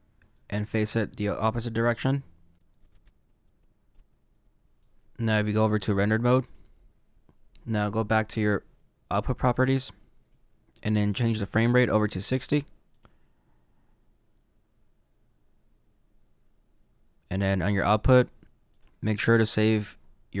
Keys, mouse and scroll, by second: 2.6 click, 2.7 click, 2.8 ctrl+z, 2.8 click, 2.9 ctrl+z, 3.0 click, 3.0 ctrl+z, 3.0 click, 3.3 middle click, 3.4 click, 3.9 ctrl+z, 4.1 click, 4.1 middle click, 4.3 click, 4.4-6.5 middle drag, 6.5 click, 7.1-16.6 middle drag, 13.0 click, 18.8 click.